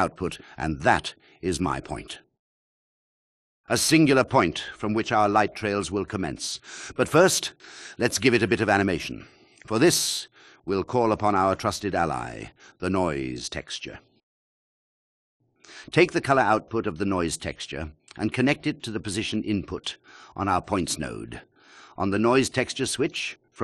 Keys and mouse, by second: 0.1 Return, 7.4 ctrl+alt+click, 11.1-14.7 drag, 15.3 shift+a, 17.3-21.5 drag, 23.0 click.